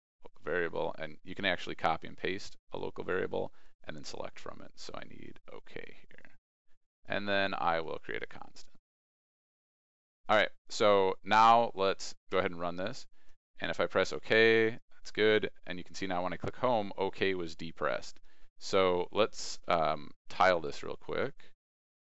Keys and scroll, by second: 11.4 ctrl+e, 12.3 ctrl+r, 19.6 ctrl+t.